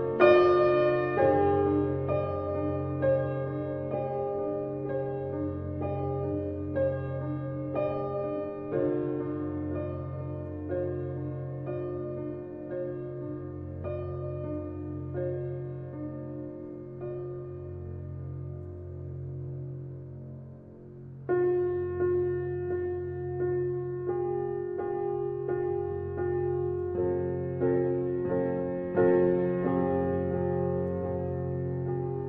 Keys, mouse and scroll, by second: 2.7 scroll up 1, 2.7-3.5 middle drag, 3.5-4.4 scroll down 2, 4.4 shift+d, 7.9 g, 9.9 r, 12.6 g, 14.2 g, 18.8 KP_0, 20.3-21.3 middle drag, 21.9 click, 22.8 shift+d, 25.3 g, 28.0 g, 29.6 r, 31.9-32.2 middle drag.